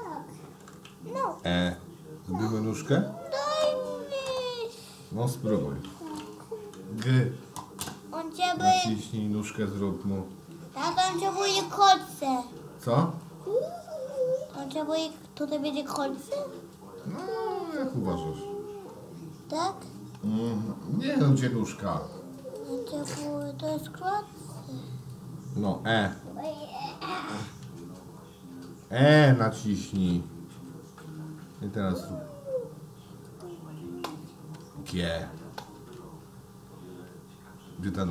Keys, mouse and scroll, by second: 1.5 e, 10.3 g, 30.4 e, 34.8 g.